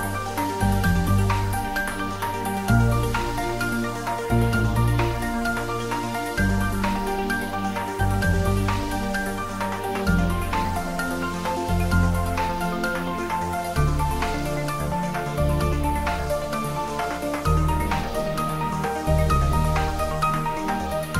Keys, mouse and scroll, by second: 0.1 click, 0.4 g, 1.1 Right, 1.9 click, 2.3-2.6 scroll down 1, 2.6 middle click, 3.6 click, 4.3 g, 6.1 click, 6.6 scroll down 1, 6.8 middle click, 7.3-7.9 scroll up 1, 8.0 shift+z, 8.2 scroll down 1, 8.4 middle click, 9.3 scroll down 1, 12.1 scroll down 1, 12.7 Tab, 13.3 ctrl+r, 14.0-14.8 scroll up 2, 14.8 scroll up 1, 14.9 click, 15.1-16.7 middle drag, 16.7-18.8 middle drag, 19.3 s.